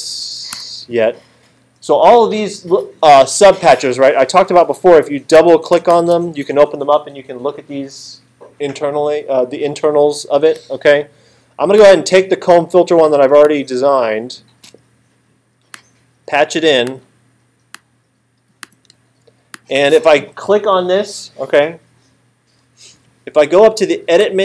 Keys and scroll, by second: 0.5 BackSpace.